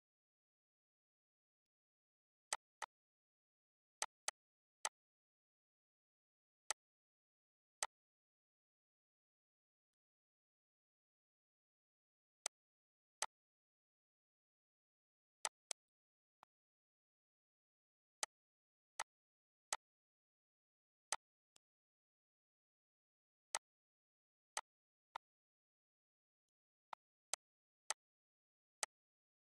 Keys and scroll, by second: 5.9 l, 7.4 ctrl+s, 9.2 Up, 27.1 e.